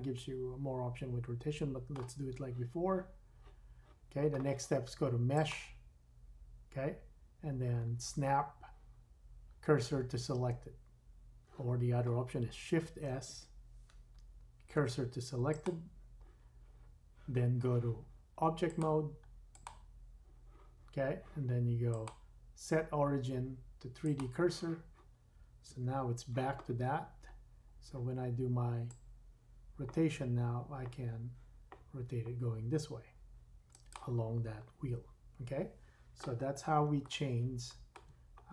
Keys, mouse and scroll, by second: 5.3-12.8 drag, 13.0 shift+s, 18.7 click, 21.9 click, 24.9-33.9 drag, 25.7 KP_3, 27.0-28.7 scroll down 3, 36.7-38.5 shift+middle drag, 38.0 shift+scroll down 1, 38.4 scroll up 2.